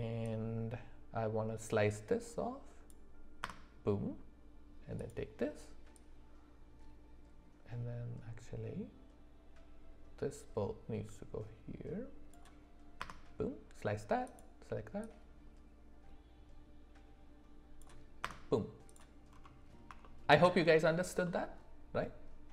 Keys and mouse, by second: 5.0 click, 5.9-13.6 drag, 15.1-18.5 drag, 20.0 shift+middle click, 21.2-22.5 middle drag.